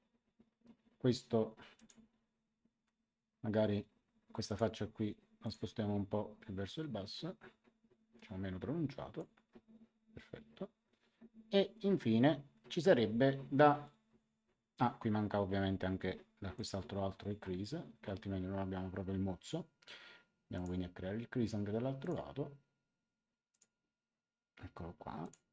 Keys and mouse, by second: 1.7 click, 4.4 click, 6.6 click, 16.5 click, 20.5 click, 21.9 click, 23.4 click, 25.2 click.